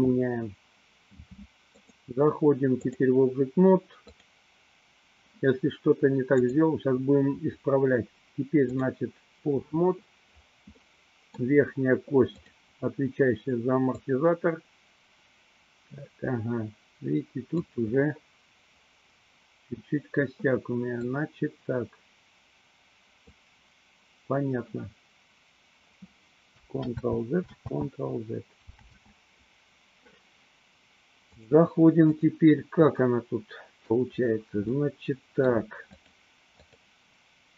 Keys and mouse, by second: 1.7-3.1 drag, 4.2 click, 6.5-9.1 drag, 10.9 middle click, 12.5 click, 14.0-17.7 drag, 21.1-23.5 drag, 26.8 ctrl+z, 27.7 ctrl+z, 29.0 ctrl+z, 31.4 click, 33.1-34.0 middle drag, 34.9-35.7 middle drag, 36.1-36.5 drag, 36.8 click.